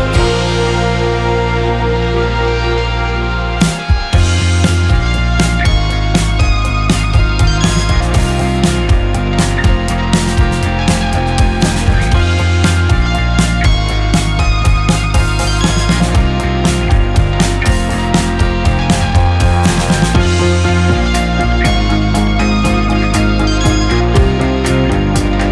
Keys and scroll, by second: 0.8 Escape, 2.8 Delete, 8.3 Escape.